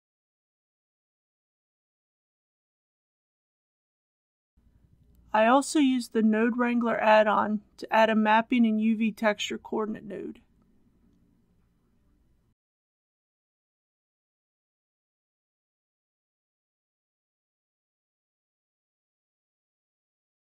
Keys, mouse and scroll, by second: 5.0 shift+t, 6.8 ctrl+t, 15.0-20.2 drag.